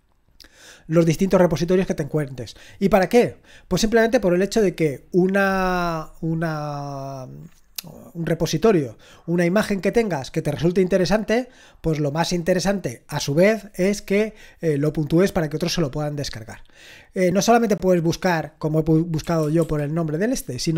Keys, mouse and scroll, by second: 17.1-18.1 scroll down 2, 18.1-19.3 drag, 19.0-20.7 typing.